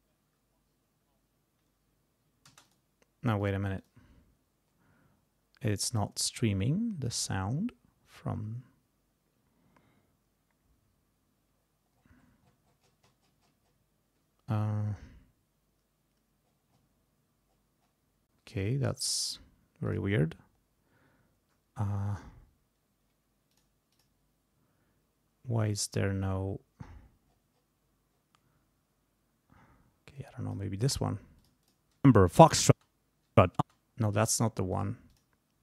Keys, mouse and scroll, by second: 2.5 space, 2.7 click, 3.4 click, 3.8 click, 11.6-12.4 scroll down 4, 12.8-13.9 scroll up 2, 16.4-17.0 scroll down 3, 17.5-18.1 scroll down 4, 19.8 click, 23.5 click, 23.9 click, 26.2 scroll up 2, 27.3-27.8 scroll up 2, 28.1-28.4 scroll up 2, 30.1 click, 31.4 click, 32.0 space, 32.7 space, 34.7 click, 35.1 click.